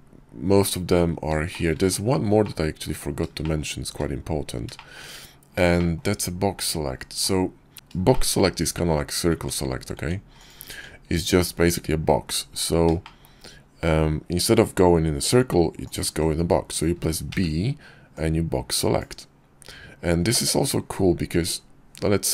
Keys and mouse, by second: 0.6 shift+middle click, 1.5-1.9 middle drag, 2.5 shift+middle click, 3.8 shift+middle click, 4.3 KP_5, 4.8 shift+middle click, 7.0 shift+click, 8.4 Tab, 9.0 Tab, 9.4 click, 9.8 Tab, 12.1 shift+click, 14.9 click, 16.4 b, 19.4-20.4 middle drag, 20.2 click, 20.4 click, 21.1-22.3 middle drag, 21.5 click, 22.1 click.